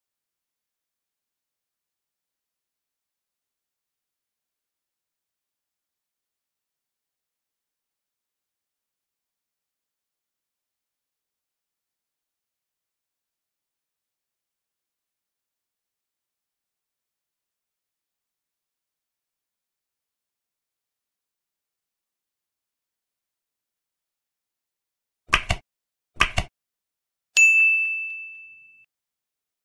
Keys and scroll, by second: 0.1 space, 0.2 space, 0.6 space, 1.1 space, 3.1 space, 3.4 space, 3.9 ctrl+BackSpace, 5.1 space, 5.7 space, 6.1 space, 7.3 ctrl+e, 8.4 ctrl+Tab, 9.0 ctrl+Tab, 10.0 Left, 10.4 Delete, 11.3 space, 13.0 Left, 13.7 End, 13.8 Left, 14.6 space, 16.1 ctrl+s, 17.3 ctrl+Left, 18.4 ctrl+s, 19.1 ctrl+s, 22.7 Tab, 29.0 ctrl+BackSpace, 29.5 ctrl+z.